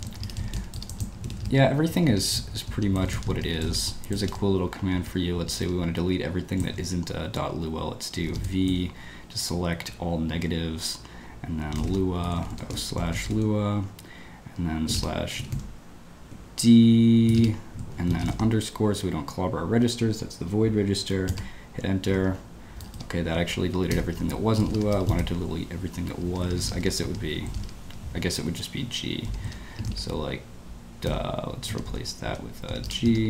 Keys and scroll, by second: 0.0-1.9 typing, 2.1 Escape, 3.1 0, 3.4 space, 3.6 e, 3.7 Escape, 5.0 Escape, 5.4 g, 5.6 g, 8.2 v, 8.3 space, 8.6 BackSpace, 11.4-13.8 typing, 14.8-18.1 typing, 21.3 Return, 22.2 Escape, 22.7-25.0 typing, 23.4 Escape, 24.2 Escape, 26.3 Escape, 26.4 Escape, 26.6 `, 27.1 Escape, 27.2 Escape, 27.9 Escape, 29.2 q, 31.0-33.2 typing, 31.6 Escape, 31.6 Escape, 33.1 Escape.